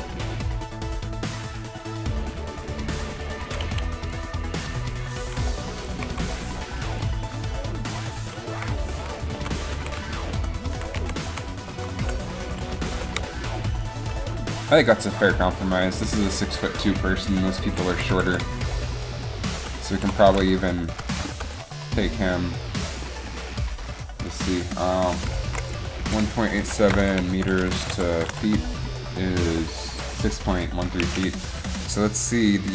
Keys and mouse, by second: 3.9 alt+a, 6.1 Down, 8.7 Down, 9.9-12.6 typing, 20.0 r, 20.1 r, 21.2 right click.